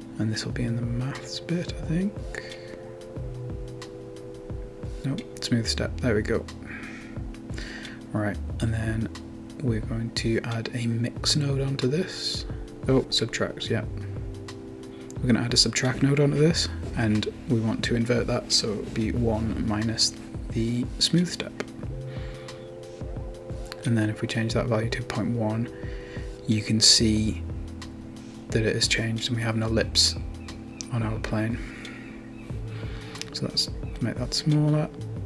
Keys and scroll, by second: 9.1-10.0 typing, 11.8-12.5 typing, 13.7 1, 13.9 Return, 20.0-20.9 typing, 28.1-28.8 typing.